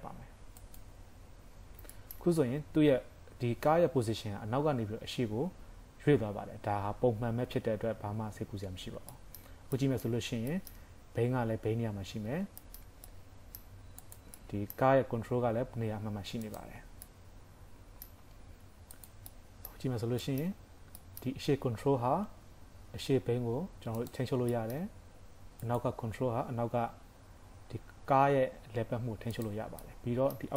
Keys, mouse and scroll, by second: 0.6 click, 1.6 scroll down 3, 1.9 shift+middle click, 2.3 scroll up 4, 3.0 scroll down 1, 8.5-8.8 scroll up 2, 8.8 scroll down 2, 9.1 shift+middle click, 9.8 middle click, 10.2 scroll up 2, 10.6 shift+middle click, 10.9 scroll up 1, 12.3-12.7 scroll down 3, 13.1 middle click, 14.1 click, 14.4 middle click, 15.1 g, 16.8 scroll down 2, 17.1 middle click, 19.1 click, 19.3 middle click, 19.9 shift+scroll up 2, 20.3 shift+middle click, 20.6 scroll up 3, 21.0 middle click, 22.5 g, 24.3 scroll down 3, 24.6 shift+middle click, 24.9 scroll up 2, 25.6 click, 26.6 g, 29.8 middle click.